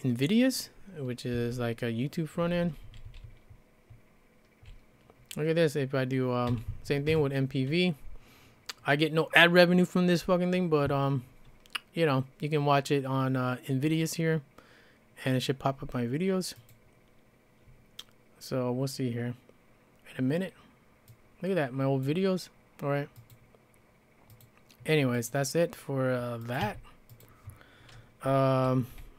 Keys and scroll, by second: 1.3 space, 2.4-4.8 typing, 6.5 e, 7.1 Return, 26.6 q, 28.9 c.